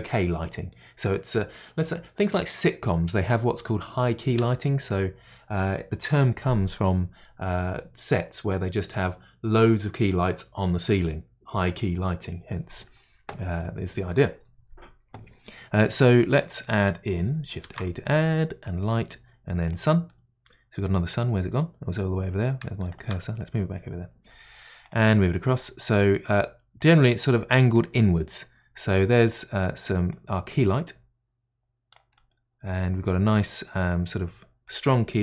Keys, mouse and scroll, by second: 16.3-17.6 middle drag, 17.6 shift+a, 19.7 shift+a, 20.1-21.3 middle drag, 21.3 scroll down 3, 22.9-24.2 shift+right drag, 24.2 g, 25.1-26.8 middle drag, 26.8-27.9 drag, 27.9-30.1 middle drag, 30.1-32.1 drag, 32.1-33.5 middle drag, 33.5-34.3 scroll up 5, 34.3-35.2 middle drag.